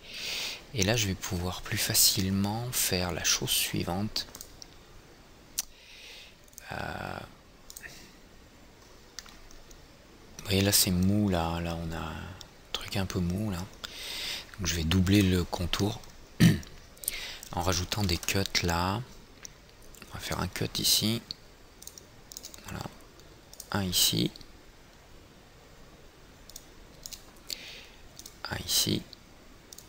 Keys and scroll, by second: 18.6 alt+c, 19.4 alt+c.